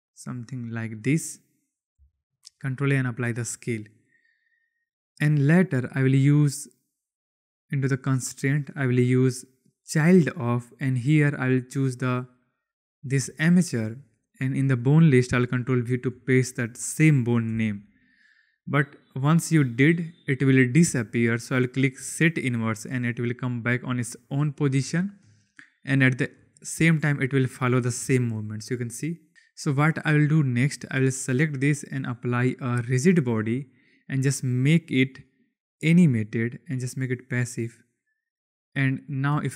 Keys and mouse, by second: 0.0 g, 2.2 ctrl+a, 7.4 click, 8.3-9.9 drag, 11.7 click, 13.3 click, 14.4-17.5 drag, 22.1 click, 24.7-25.1 shift+drag, 26.3 space, 30.3 space, 31.8 click, 32.9 click, 35.6 click, 36.3-36.9 drag, 39.0 click, 39.2 space.